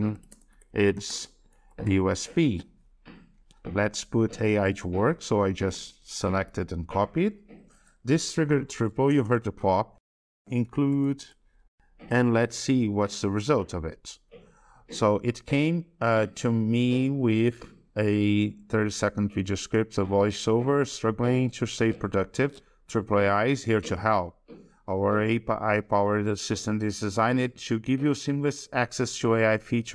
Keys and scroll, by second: 6.3 ctrl+c, 13.0 ctrl+v.